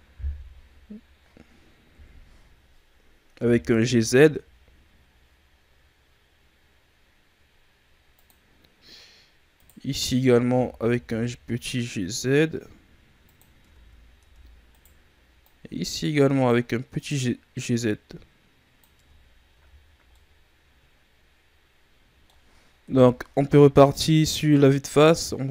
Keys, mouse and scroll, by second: 1.8 KP_1, 3.3 g, 8.4-9.5 scroll up 2, 9.5 right click, 9.9-10.4 shift+scroll down 1, 10.4 g, 13.6 Tab, 14.1 Tab, 14.6 right click, 15.4 click, 16.9 right click, 17.5 click, 18.9 Tab, 19.2 scroll down 2, 19.5 a, 20.0-22.7 middle drag, 22.7 KP_1, 23.9-24.3 scroll up 3, 24.9-25.5 scroll down 3.